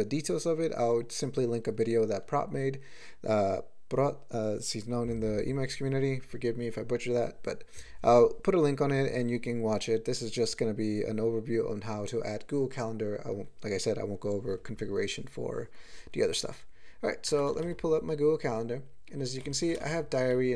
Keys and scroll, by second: 19.4 ctrl+n, 19.6 ctrl+n, 19.8 ctrl+space, 20.4-20.5 ctrl+n.